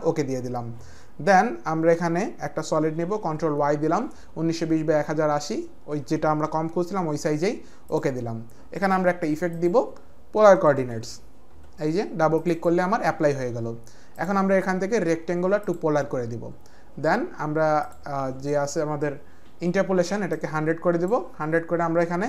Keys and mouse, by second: 2.0 click, 3.1 ctrl+y, 3.2 click, 7.8 click, 9.5 click, 10.2-11.5 typing, 12.4 click, 14.2 click, 15.5 click, 20.3 click.